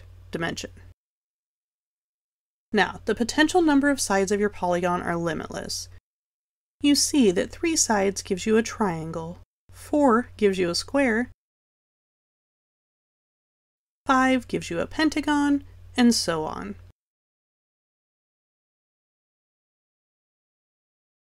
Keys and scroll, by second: 3.0 1.